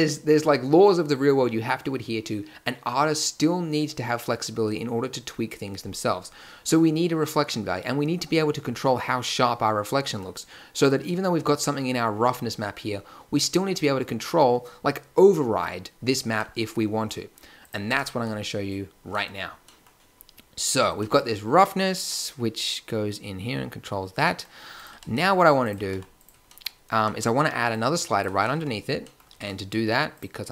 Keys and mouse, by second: 12.3-14.2 middle drag, 17.9 Tab, 24.9 g, 25.9 g, 29.3 shift+a.